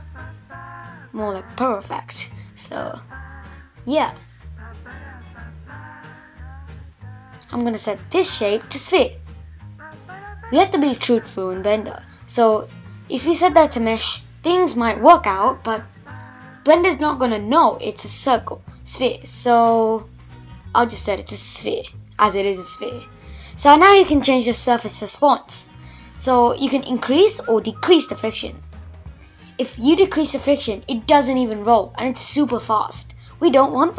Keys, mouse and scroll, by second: 1.2 shift+Left, 1.7-2.4 scroll down 4, 2.4-5.4 middle drag, 5.4-7.8 drag, 7.8 space, 8.1-8.8 scroll up 4, 8.8-10.1 middle drag, 10.1 scroll up 1, 10.3-12.0 middle drag, 12.0-14.0 scroll down 4, 14.0 shift+Left, 14.9 space, 15.2-15.9 scroll up 4, 15.9-17.2 middle drag, 17.2 shift+Left, 17.6 space, 17.9-18.8 scroll down 4, 18.8 space, 19.8-20.7 scroll down 2, 20.7-21.5 scroll down 1, 21.5-24.6 drag, 25.4 click, 26.4 space, 27.6 shift+Left, 31.5 shift+Left, 32.7 space.